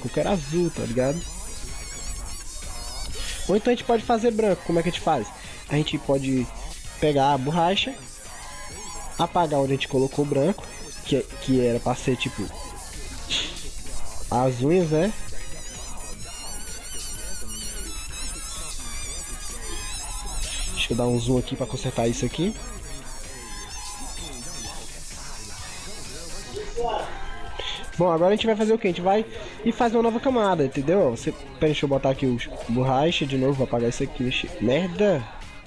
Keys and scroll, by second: 20.7 ctrl+=, 27.3 ctrl+0.